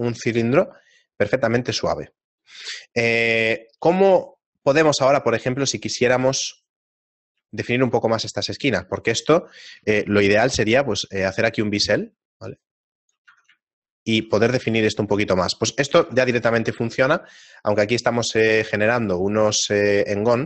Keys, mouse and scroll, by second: 0.1 shift+middle click, 4.7 Tab, 5.3 shift+middle click, 6.6 right click, 6.6 a, 7.5 shift+right click, 8.9 right click, 9.4 middle click, 10.2 ctrl+b, 13.3 Tab, 13.8 shift+middle click, 15.5 shift+middle click, 15.5-17.1 scroll up 3, 16.0 Tab, 17.1-17.9 scroll up 1, 17.9 ctrl+Tab.